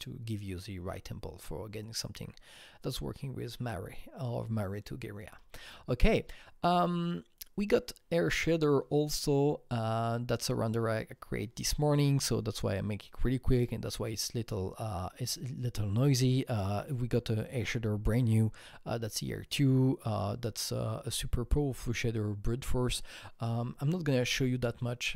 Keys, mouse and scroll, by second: 5.2 Right, 6.2 Right.